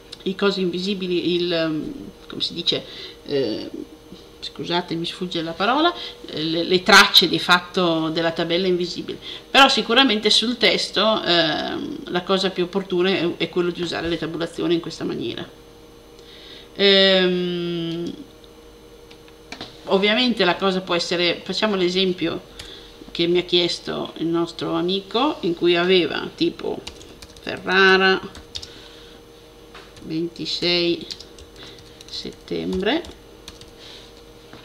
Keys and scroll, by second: 21.3 super+a, 26.4-28.7 typing, 29.8-34.0 typing.